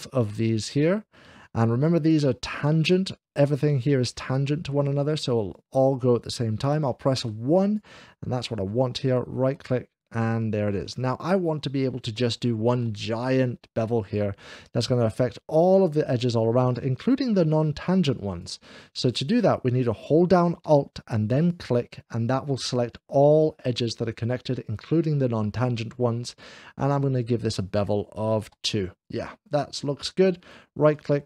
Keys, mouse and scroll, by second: 0.0-0.7 scroll up 1, 1.6 Escape, 2.4 shift+click, 4.1-5.1 middle drag, 4.8 scroll up 1, 5.4 click, 8.9-10.1 right drag, 9.2 Escape, 10.1 middle click, 11.2 scroll up 1, 12.0-13.1 shift+middle drag, 12.6 click, 14.3 click, 18.2 click, 21.2 alt+click, 23.2 scroll down 1, 26.4 click, 26.7 scroll up 1, 28.3 2, 29.1 scroll down 1, 30.3-31.2 right drag.